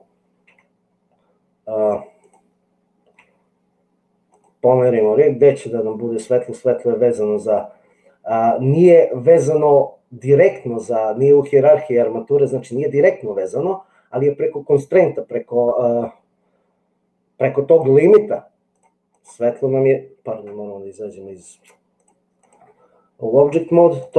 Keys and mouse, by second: 0.4 g, 2.2 click, 3.4 g, 19.0 click, 20.5 Tab, 21.9 click.